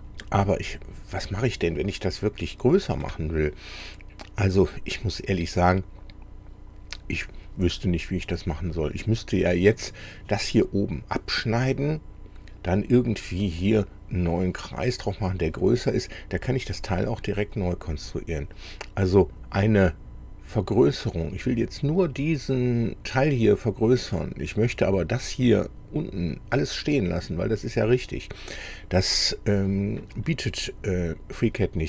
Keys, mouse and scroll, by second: 24.1 middle click, 30.3-31.8 middle drag.